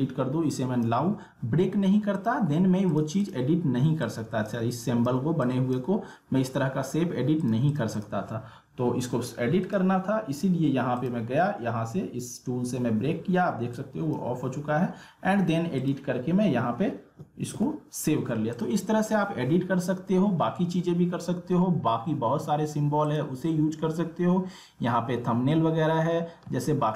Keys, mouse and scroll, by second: 0.5 click, 13.7-17.9 drag, 18.5 click, 23.1 click.